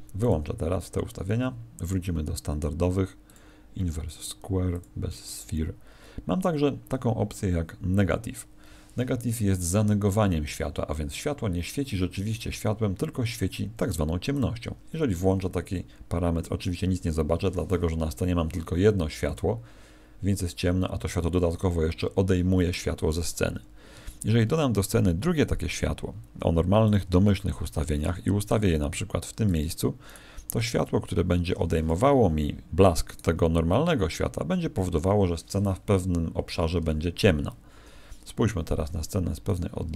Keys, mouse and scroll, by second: 22.6 Escape, 24.4 shift+a, 28.0 g, 29.5 ctrl+click, 30.0 right click, 30.7 g, 31.8 click, 33.0 right click, 36.3 Escape, 37.7 KP_0, 39.4 right click, 39.8 h.